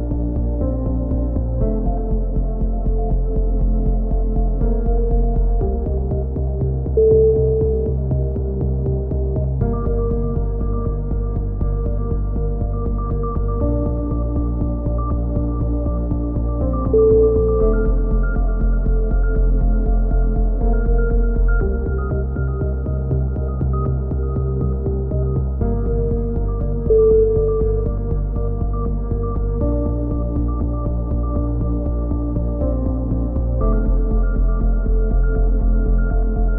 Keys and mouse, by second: 0.1-1.3 right drag, 1.4-2.9 drag, 2.7 a, 3.5 c, 4.3-5.6 drag, 6.4 click, 7.3 a, 7.6 z, 7.7-9.1 middle drag, 8.0 z, 9.6-10.6 middle drag, 11.7 KP_7, 12.1-13.4 middle drag, 13.6 KP_3, 14.2-15.2 drag, 16.1 z, 16.4 click, 17.9 KP_7, 18.4 z, 18.9 z, 19.0-20.1 drag, 22.0 right click, 22.6 KP_1, 23.0 z, 24.3-25.8 middle drag, 25.8 KP_3, 28.4 KP_1, 30.0 middle click, 30.8 middle click, 31.4 KP_3, 33.3 middle click, 33.7-36.3 typing.